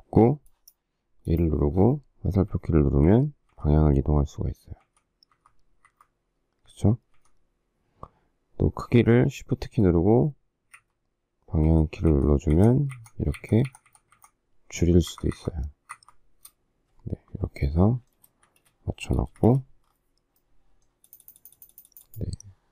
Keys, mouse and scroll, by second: 5.9 Right, 7.1 Left, 10.7 shift+Down, 11.6 shift+Left, 15.1 shift+Right, 18.2 space, 18.4 Escape, 19.2 space, 19.3 Escape.